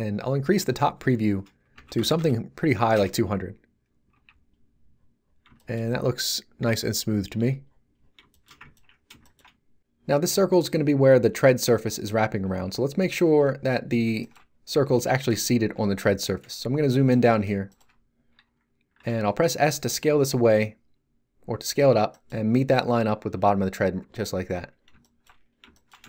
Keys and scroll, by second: 1.7 2, 1.9 0, 2.9 Return, 4.1 Tab, 15.6 z, 19.5 s.